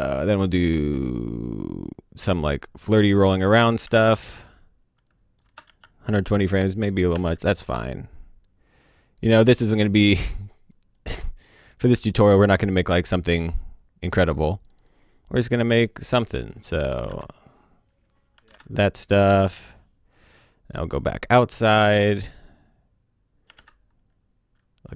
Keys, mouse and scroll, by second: 0.0 click, 3.9 space, 5.0 click, 5.4 space, 7.1 o, 7.2 space, 7.4 click, 13.8-14.6 scroll down 1, 14.6 click, 17.0 space, 18.3 o, 18.4 space, 18.6 click, 23.5 space.